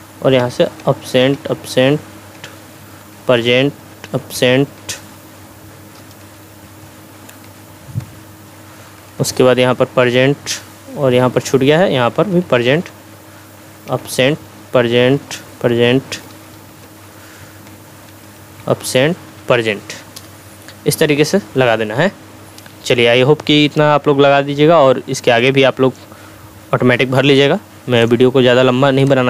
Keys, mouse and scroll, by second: 0.4 a, 0.8 Tab, 1.2 a, 1.5 Tab, 2.1 p, 2.3 Tab, 3.0 p, 3.4 Tab, 4.3 Tab, 4.8-5.1 typing, 6.2 Tab, 7.0 p, 7.4 Tab, 7.7 p, 8.0 Tab, 9.6 p, 11.0 BackSpace, 12.3 p, 12.6 Tab, 13.9-17.4 typing, 14.1 Tab, 15.1 Tab, 15.7 Tab, 16.3 Tab, 16.8 Tab, 17.7 Tab, 18.5 a, 18.8 Tab, 19.3 p, 20.2 Return, 25.4-26.0 drag.